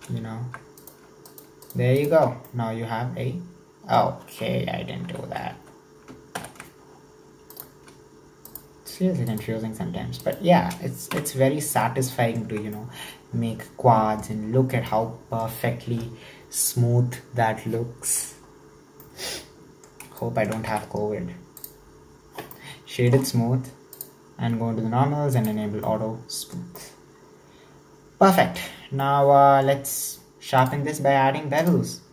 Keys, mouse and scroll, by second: 0.7 right click, 1.3 shift+right click, 1.7 shift+right click, 2.0 shift+right click, 2.3 scroll down 1, 2.5-5.1 middle drag, 5.1 1, 5.6 KP_1, 6.4 ctrl+KP_7, 6.9-7.6 scroll up 3, 7.6 right click, 8.5 shift+right click, 9.3-10.4 shift+right drag, 11.2 f, 11.5-11.8 scroll down 4, 11.8 middle click, 12.4 scroll down 1, 12.6 Tab, 12.8-14.6 middle drag, 14.6 scroll down 1, 14.8-18.0 middle drag, 18.2 scroll down 1, 18.4-19.0 scroll up 2, 19.0-20.8 middle drag, 20.8 w, 22.4 scroll down 1, 22.6-23.9 middle drag, 23.9 click, 25.4 click, 25.9-26.7 middle drag, 26.7 scroll down 1, 26.8-30.6 middle drag, 30.6 click, 31.6-32.1 drag.